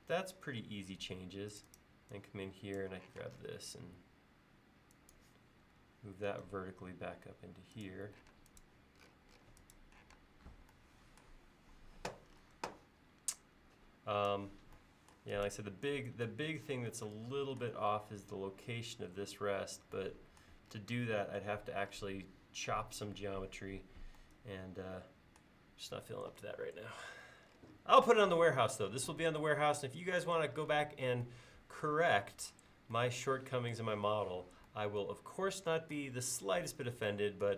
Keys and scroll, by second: 3.2 m, 8.4 space, 10.2 space.